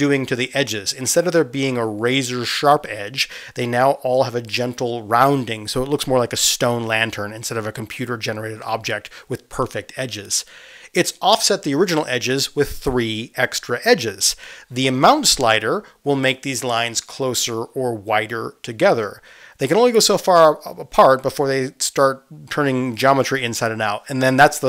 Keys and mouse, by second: 0.0-2.8 middle drag, 0.6 space, 2.8-24.6 drag.